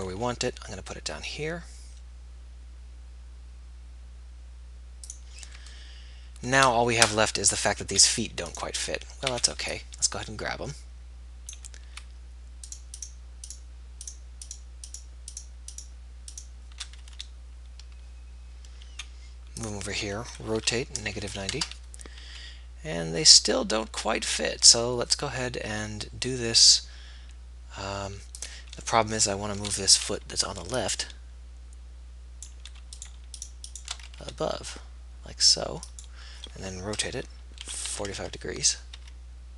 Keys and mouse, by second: 0.4 b, 0.4 g, 8.7 a, 9.6 a, 13.0 b, 18.1 g, 20.9 r, 22.4 g, 30.5 a, 33.3 b, 34.4 g, 37.9 r, 39.4 g.